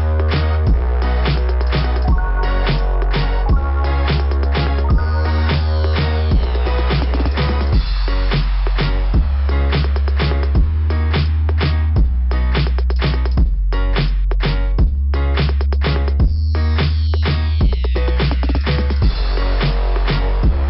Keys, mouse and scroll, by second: 0.7-1.0 scroll up 2, 1.0 scroll down 2, 1.1 scroll up 2, 1.4 scroll down 2, 1.4 scroll up 2, 1.7 scroll down 2, 1.8 scroll up 2, 7.3 right click, 7.4 right click, 9.2 click, 10.3 right click, 11.6 click, 14.2 click, 14.4 click.